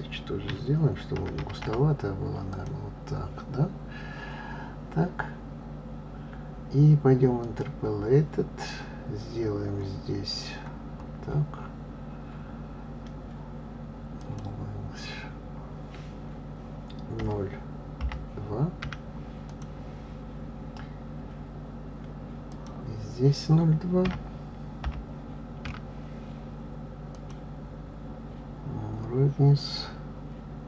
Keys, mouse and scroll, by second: 8.3 click, 11.3 scroll down 2, 11.9-14.9 scroll down 2, 15.0-18.0 drag, 23.4-26.4 drag, 30.1-30.6 scroll down 3.